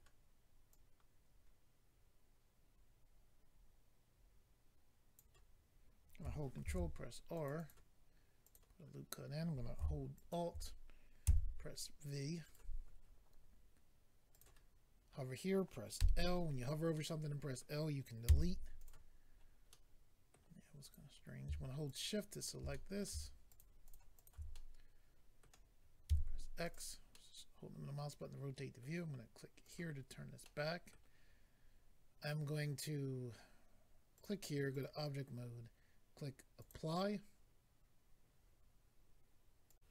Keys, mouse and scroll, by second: 0.7 click, 6.6 ctrl+r, 7.3 click, 7.5 click, 7.6 click, 7.7 double click, 8.4 double click, 8.5 double click, 10.2 alt+click, 11.2 v, 12.4 right click, 14.3 click, 14.4 click, 16.0 i, 16.5-16.9 scroll down 2, 16.9 middle click, 18.8 click, 18.8 x, 18.8 click, 19.2 scroll up 1, 19.7 scroll up 1, 20.3 middle click, 20.8 click, 21.8 shift+click, 21.9 shift+click, 22.3 shift+click, 22.4 shift+click, 22.7 middle click, 23.5 middle click, 23.5 shift+click, 23.6 shift+click, 23.8 shift+click, 23.9 shift+double click, 24.1 shift+click, 24.3 shift+click, 24.5 middle click, 26.1 x, 26.6 click, 26.7 click, 27.1 middle click, 29.6 click, 30.0-30.3 scroll down 2, 30.4 middle click, 34.1 click, 34.2 click, 34.7 click, 34.8 click, 36.6 click, 36.7 click, 39.7 click, 39.7 click.